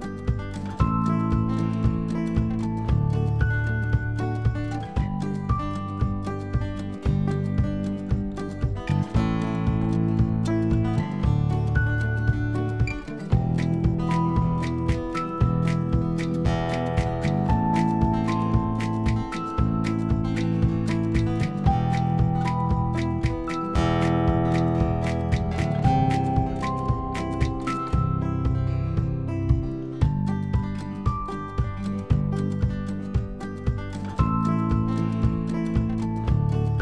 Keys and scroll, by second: 17.4 ctrl+t.